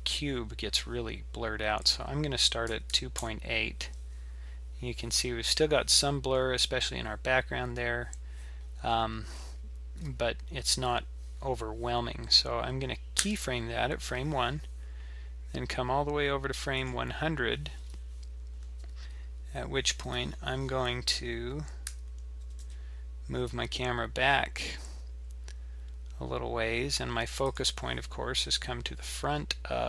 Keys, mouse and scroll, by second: 1.8 click, 13.2 i, 16.8 click, 20.2-21.9 scroll down 10, 21.9 scroll down 1, 21.9 g.